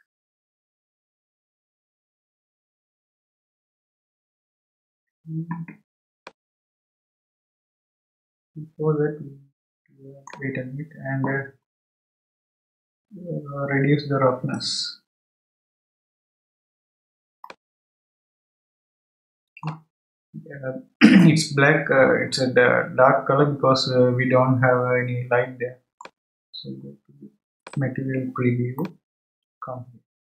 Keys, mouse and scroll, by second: 6.2-9.2 middle drag, 11.9 scroll down 2, 14.5-17.5 drag, 17.5-20.5 middle drag, 21.2-24.2 middle drag, 27.6 click, 28.8-30.2 middle drag.